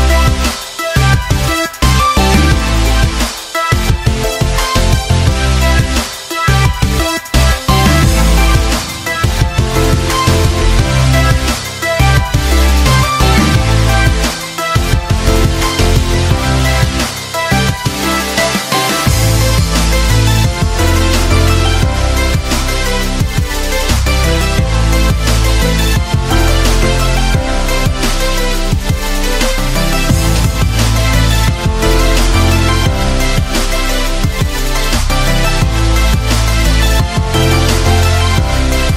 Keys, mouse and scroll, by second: 0.7 k, 2.3 shift+], 2.8 Return, 3.4 shift+\, 3.7 Up, 3.9 Tab, 7.1-35.8 right drag, 35.8-36.4 typing, 38.1-38.8 typing.